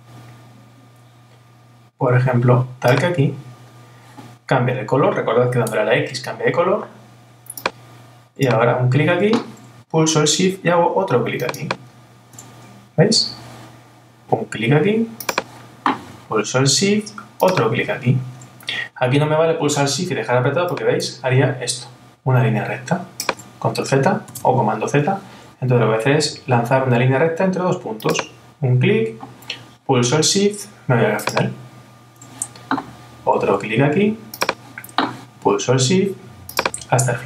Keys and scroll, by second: 24.3 super+z.